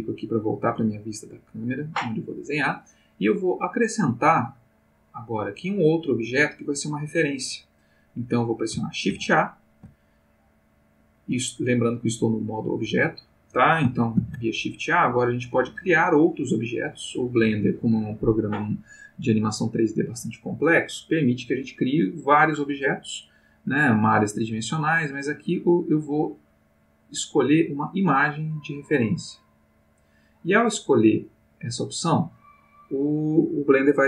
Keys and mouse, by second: 0.2 click, 9.1 shift+a, 14.2 shift+a, 29.8 click, 31.2 click.